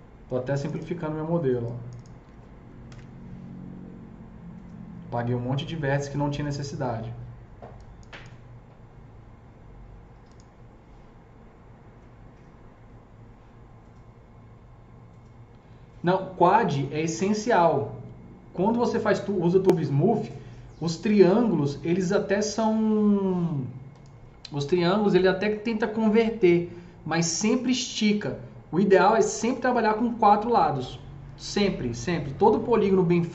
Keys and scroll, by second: 2.8 ctrl+BackSpace.